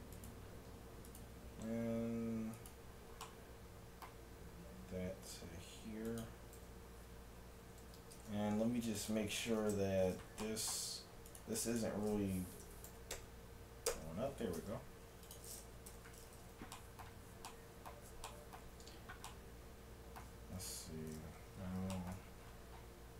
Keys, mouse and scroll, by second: 1.1-2.9 right drag, 1.6 g, 2.9-5.1 middle drag, 4.7 g, 7.9 a, 8.2 ctrl+Tab, 9.7 shift+Tab, 10.5-12.6 middle drag, 11.3-13.5 right drag, 12.6 s, 14.6 ctrl+Tab, 15.9 t, 16.8-19.5 middle drag, 19.9 middle click, 20.1 middle click, 20.6 KP_1, 20.8 KP_7.